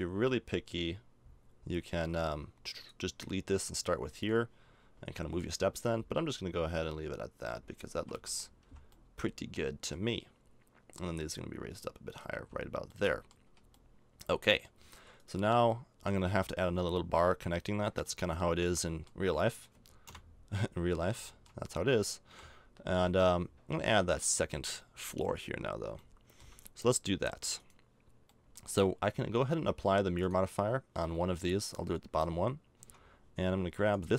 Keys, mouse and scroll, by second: 7.6-8.7 middle drag, 7.9 a, 8.2 Tab, 8.7 z, 9.0-11.0 middle drag, 11.0 click, 12.3 z, 13.5 a, 15.7 middle click, 18.4 middle click, 18.8 middle click, 19.3 middle click, 19.9 middle click, 20.1 KP_0, 20.9 middle click, 22.3 KP_7, 26.0 middle click, 32.8 Tab.